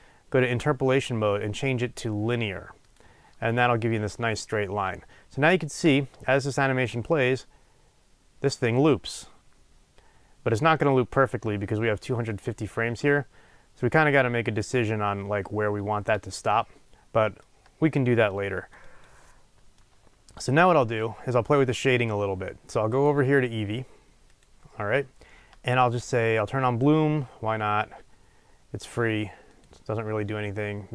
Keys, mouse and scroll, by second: 5.9 space, 8.1-15.7 drag, 16.0 space, 17.4-26.4 drag.